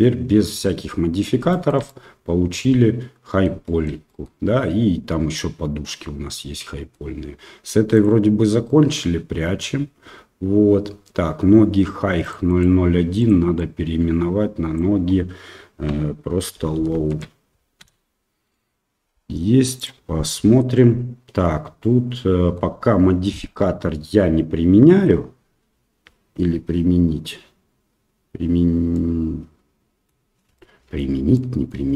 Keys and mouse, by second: 0.6-1.2 middle drag, 1.5 shift+middle drag, 1.8-3.4 middle drag, 3.6 shift+middle drag, 4.0 middle click, 5.3-6.9 middle drag, 7.9 click, 12.2 click, 12.5-18.4 drag, 19.7 click, 20.2 middle click, 21.8-22.5 middle drag, 23.5-25.0 middle drag, 28.9-30.0 middle drag, 30.5-31.0 middle drag, 31.3-31.7 shift+middle drag.